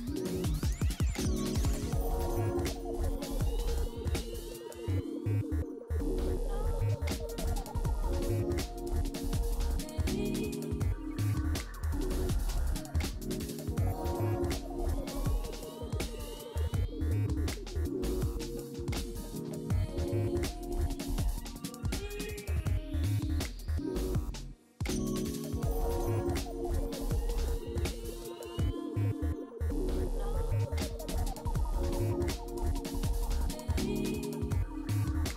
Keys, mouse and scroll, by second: 1.1-2.6 scroll down 4, 5.7 right click, 14.2 right click, 25.6 shift+click, 31.8 shift+click.